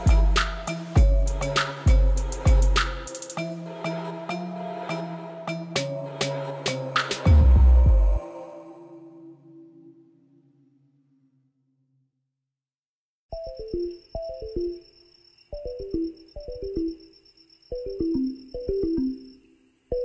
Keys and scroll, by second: 0.6 g, 0.9 x, 5.6 g, 5.7 z, 7.6 shift+d, 8.1 y, 10.7 g, 10.8 y, 15.2 1, 15.8 0, 15.9 Return, 16.7 g, 16.9 x.